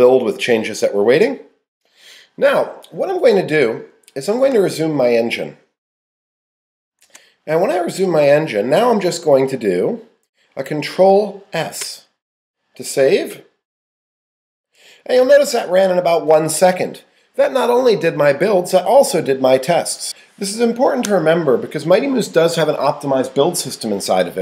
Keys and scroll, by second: 7.0 super+z.